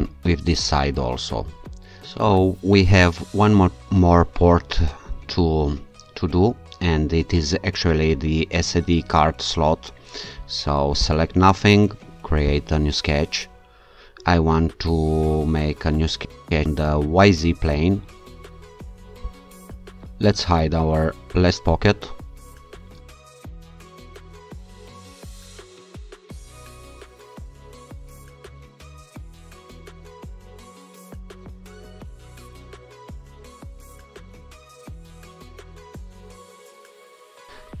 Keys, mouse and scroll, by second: 11.1 alt+click, 12.5 click, 16.4 click, 19.3 click, 21.4 click, 23.4 alt+click, 23.8 click, 24.2 click, 24.6 scroll up 1, 24.8 click, 24.9 scroll down 1, 25.2 click, 25.5 right click, 25.7 click, 26.0 Delete, 26.3 click, 26.5 click, 26.7 click, 27.0 click, 27.5 click, 27.7 click, 28.0 scroll up 2, 28.1 click, 28.4 click, 29.0 scroll down 3, 29.4 shift+right click, 29.6 click, 29.8 click, 29.9 click, 30.0-32.1 typing, 30.3 click, 30.5 click, 30.7 click, 31.2 click, 33.0 shift+middle click, 33.3 shift+h, 33.6 1, 33.7 Return, 34.2 click, 34.5 Return, 36.2 click, 36.4 click, 36.7-37.8 typing.